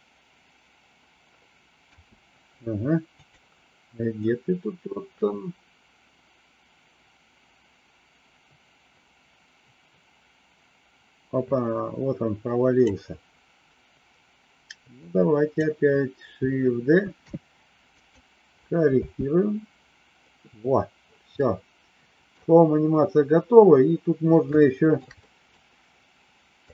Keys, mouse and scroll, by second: 3.3 click, 4.3-12.8 drag, 14.9 click, 17.0 shift+d, 19.0 space, 21.4 middle click, 24.5 shift+middle click, 25.1 middle click.